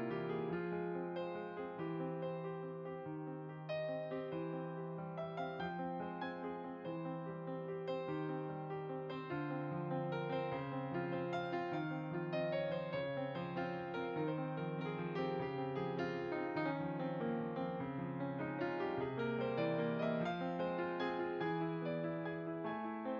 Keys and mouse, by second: 5.0 ctrl+z, 5.0 click, 5.7 click, 7.0 s, 8.5 click, 9.0-11.5 typing, 9.9 click, 12.5 click, 13.7 middle click, 14.8 middle click, 15.2 click, 15.3 middle click, 16.9 click, 17.9 Tab, 18.4 click.